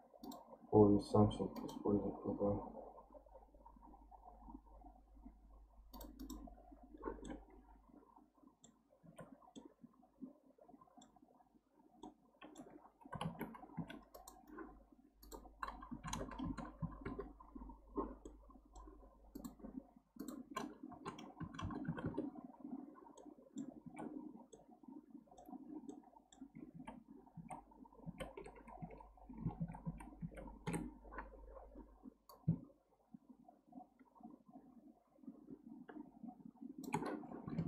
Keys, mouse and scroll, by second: 0.2-3.2 drag, 5.9-7.2 drag, 7.2-9.0 middle drag, 9.0 alt+z, 9.5-13.2 middle drag, 13.2 alt+z, 13.7 2, 14.1 click, 15.2-16.4 drag, 16.4 KP_0, 18.2-19.3 middle drag, 19.3 click, 20.2-21.6 drag, 21.6 KP_0, 23.2 middle click, 23.8 alt+z, 24.2-24.5 scroll up 1, 24.5-26.7 middle drag, 26.7 ctrl+z, 27.3 ctrl+z, 29.6 ctrl+shift+z, 29.8 ctrl+shift+z, 32.3-35.4 drag, 37.5 alt+z.